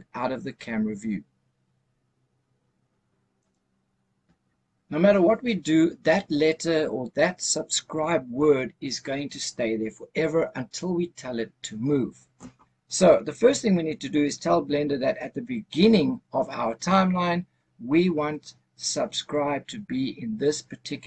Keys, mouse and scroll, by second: 3.3 click, 6.2 scroll down 2, 11.1-14.3 scroll up 1.